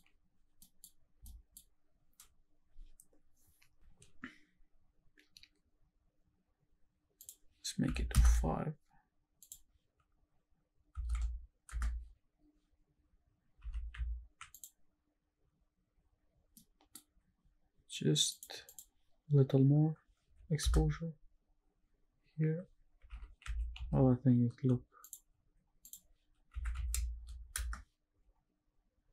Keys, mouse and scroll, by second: 0.6 middle click, 1.3 shift+middle click, 7.2-8.2 drag, 9.4-11.8 drag, 13.7 shift+`, 16.6 middle click, 18.3 shift+click, 18.7-20.7 shift+drag, 23.1 shift+`, 25.8-27.6 shift+drag, 27.1 KP_0.